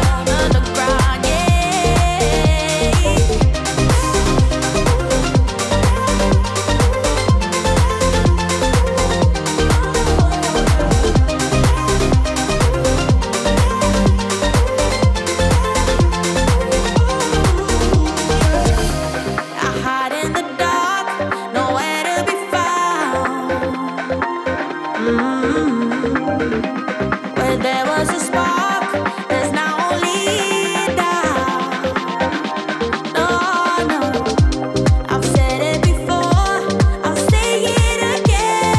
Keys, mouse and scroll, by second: 6.9 space, 8.0 click, 9.4-11.5 typing, 12.6-13.9 typing, 15.6 click, 16.3-17.2 typing, 17.4 Return, 18.6 click, 18.8-19.6 typing, 19.1 right click, 19.7 click, 21.2-22.1 typing, 22.2 Return, 24.5 click, 24.5 typing, 26.1 ctrl+space, 26.5-27.5 typing, 27.9 Return, 29.4-38.7 drag.